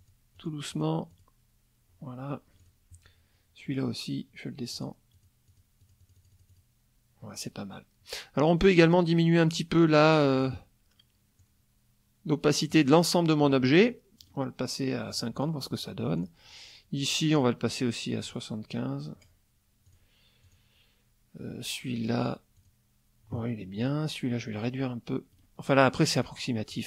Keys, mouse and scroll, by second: 0.0 click, 0.4 click, 0.7 click, 1.1 click, 2.6 click, 4.8 click, 5.2 click, 5.8 click, 8.8 click, 10.4 click, 11.4-12.9 drag, 14.2 click, 15.1 click, 16.2 click, 17.4 right click, 18.2 click, 19.9 click, 20.4 click, 22.6 click, 23.8 click, 25.3 right click, 26.2 click, 26.7 click.